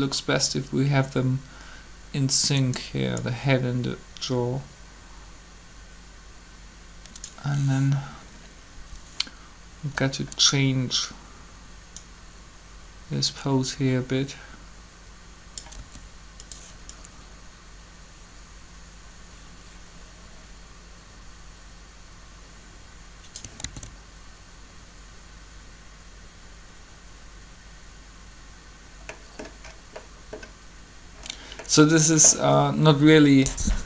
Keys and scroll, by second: 15.8 r, 23.6 alt+a.